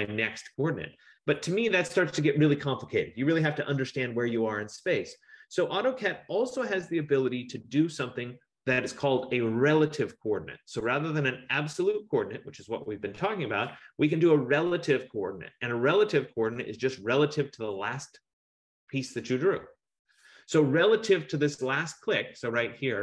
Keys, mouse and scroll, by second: 6.4 F15.